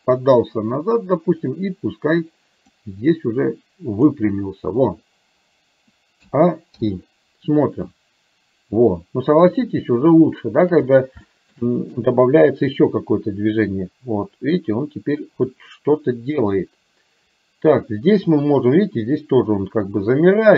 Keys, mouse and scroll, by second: 2.7 click, 3.2-4.2 drag, 6.3 a, 6.8 i, 7.9-9.7 drag, 10.3 shift+middle click, 11.3 shift+middle click, 12.8-20.5 drag.